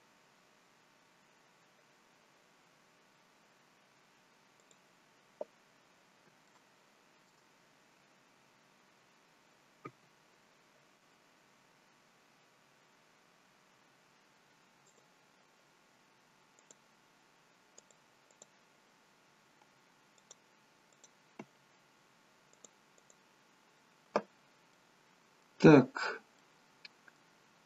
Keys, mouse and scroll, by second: 3.1 scroll up 1, 3.9 scroll down 1, 4.6 click, 5.7-6.1 scroll up 2, 6.5 shift+middle click, 8.1 scroll up 1, 8.7 scroll up 1, 9.8 a, 13.4-14.4 scroll down 3, 14.8 click, 16.6 click, 17.8 click, 18.3 click, 20.2 click, 20.9 click, 22.6 click, 23.0 click, 24.7 middle click, 26.3 middle click.